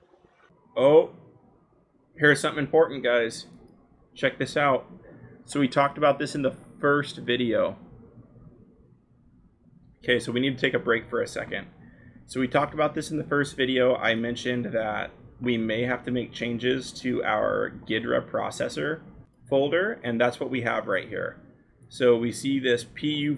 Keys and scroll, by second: 0.2 Up, 0.6-0.9 scroll, 6.7-7.0 scroll, 9.8-11.4 scroll.